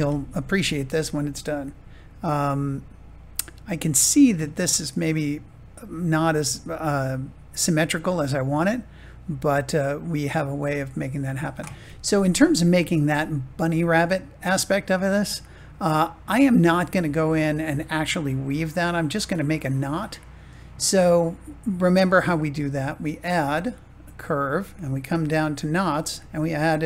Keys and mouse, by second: 1.5-3.9 middle drag, 13.0-14.1 middle drag, 18.5-19.9 middle drag, 22.9-26.8 drag.